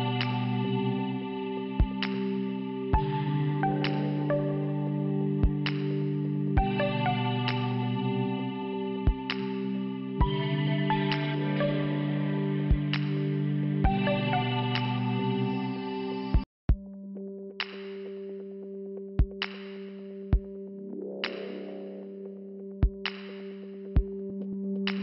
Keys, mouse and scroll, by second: 0.2 click, 0.6 click, 0.9 click, 1.3 click, 1.6 click, 3.5 click, 3.6 click, 4.0 click, 4.2 click, 5.1 scroll down 1, 6.6 p, 8.5 click, 11.3 click, 12.8 f, 14.0 scroll up 1, 17.1 click, 18.6 click, 19.6 click, 20.7 scroll up 1, 23.9 click.